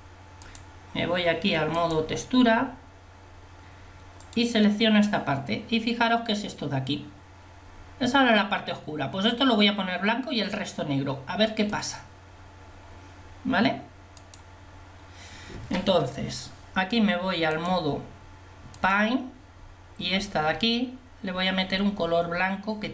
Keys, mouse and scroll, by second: 4.3-10.6 drag.